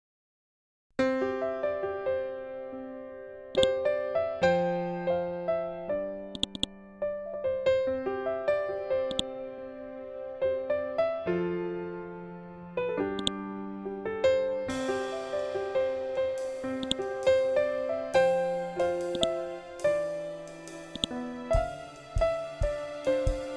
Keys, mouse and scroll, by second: 3.0 click, 5.8 click, 8.6 click, 11.0 shift+Tab, 12.7 click, 16.3 click, 18.6-23.5 drag.